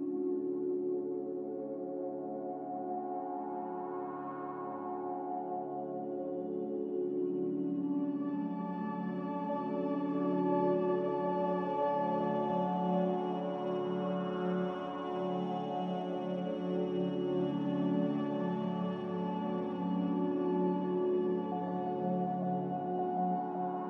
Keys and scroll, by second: 0.9 ctrl+v, 1.6 b, 2.2 n, 4.9 a, 9.3 n, 14.8 ctrl+z, 18.2 a.